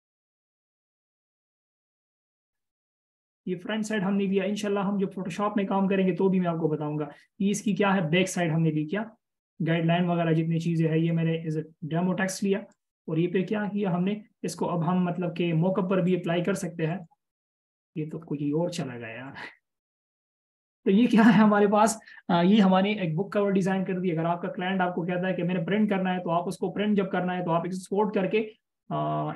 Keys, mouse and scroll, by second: 19.4 right click.